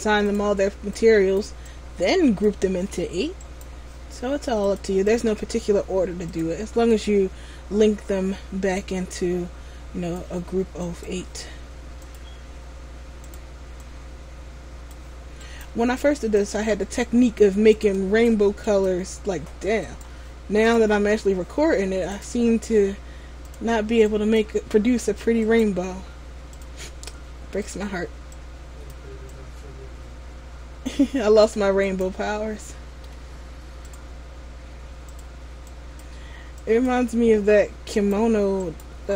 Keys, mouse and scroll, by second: 3.5 right click, 4.7 click, 11.0 right click, 12.1 click, 15.5 right click, 16.5 click, 20.0 right click, 20.7 click, 25.6 right click, 26.6 click, 32.0 right click, 32.4-32.9 scroll down 3, 32.8 middle click, 38.1 right click, 38.8 right click.